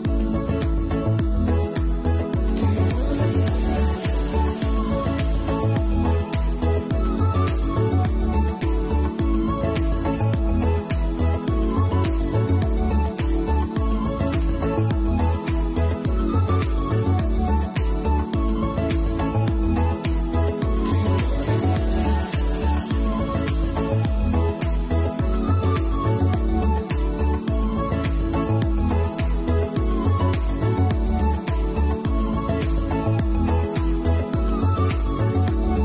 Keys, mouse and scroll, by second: 2.8 ctrl+x, 3.6 ctrl+z, 4.2 middle click, 4.6 ctrl+z, 5.1 middle click, 6.9-7.5 scroll down 3, 7.5 middle click, 8.1 shift+middle click, 12.7 middle click, 14.0 shift+middle click, 14.6-15.2 scroll down 2, 15.0 middle click, 17.1 shift+middle click, 17.7 Tab, 18.9 alt+click, 19.7 alt+shift+click, 20.1 middle click, 20.8 shift+middle click, 21.4 middle click, 22.4 alt+shift+click, 24.7 scroll down 3, 25.1 shift+middle click, 25.6 middle click, 26.0-26.6 scroll up 6, 26.5 middle click, 27.5 alt+shift+click, 29.3 middle click, 30.0-30.5 scroll down 2, 30.5 shift+middle click, 31.2-31.6 scroll down 2, 33.5 scroll down 1, 34.0 middle click, 34.6 shift+middle click, 35.4 middle click.